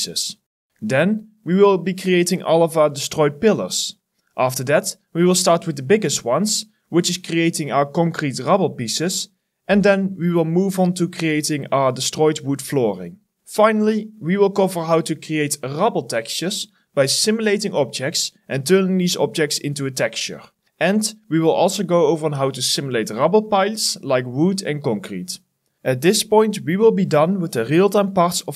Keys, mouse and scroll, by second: 4.9 alt+middle click, 5.0 alt+right click, 5.1 alt+click, 5.3 alt+middle click, 5.5 alt+right click, 5.6 alt+click, 5.8 alt+middle click, 5.9 alt+right click, 6.0 alt+click, 6.3 alt+middle click, 6.5 alt+click, 6.8 alt+middle click, 6.9 alt+right click, 7.0 alt+click, 7.2 alt+middle click, 8.7-9.1 scroll up 1, 9.1 scroll down 1, 9.5 double click, 9.6 middle click, 9.8 scroll up 1, 10.3-10.8 scroll down 2, 10.6 middle click, 10.9 middle click, 12.4 Delete, 12.9 middle click, 13.1 scroll up 1, 13.3 scroll down 1, 13.8 scroll up 1, 13.9 middle click, 15.4 middle click, 15.4 scroll down 1, 15.6 alt+middle click, 15.6 scroll up 1, 15.8 middle click, 20.1 alt+middle click, 20.3 scroll up 1, 20.6 middle click, 20.8 scroll down 1, 20.9 middle click, 22.1 middle click, 22.4 alt+middle click, 22.6 scroll down 1, 22.7 middle click, 22.9 alt+middle click, 23.5 scroll down 1, 23.7 middle click, 23.8 alt+middle click, 24.1 scroll up 1, 24.6 scroll down 1, 24.8 middle click, 25.1 shift+click.